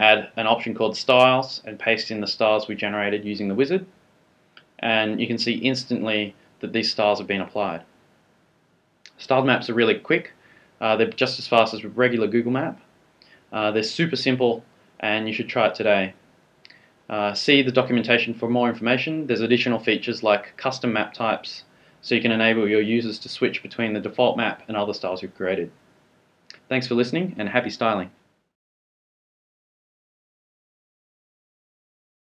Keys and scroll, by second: 0.3 Return, 1.7 super+v, 3.9 super+s, 5.3 shift+super+r.